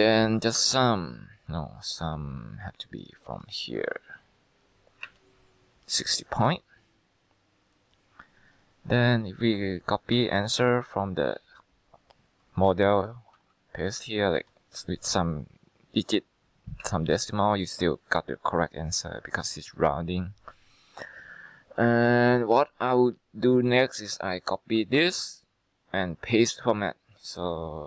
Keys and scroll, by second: 0.7 alt+=, 5.2 Return, 10.3 1, 10.7 6, 13.0-14.4 typing, 16.9 Return, 25.1 ctrl+c.